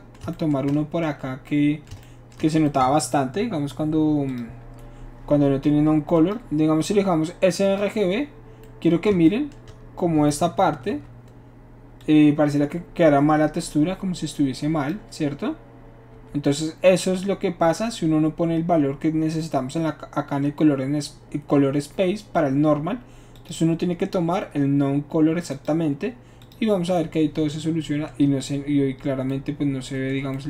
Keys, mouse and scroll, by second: 4.3 shift+click, 6.2 click, 7.7 click, 10.9 7, 16.3 7, 23.4 click, 25.5 click, 26.4 click, 27.0-28.1 middle drag, 28.4-30.1 middle drag.